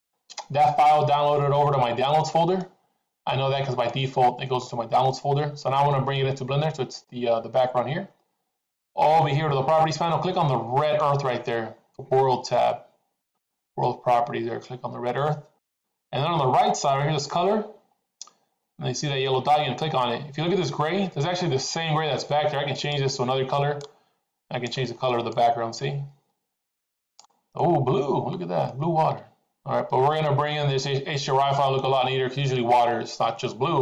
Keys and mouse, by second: 2.1 middle click, 3.9 middle click, 13.1 click, 22.6 click, 27.5-28.6 middle drag, 31.3 middle click.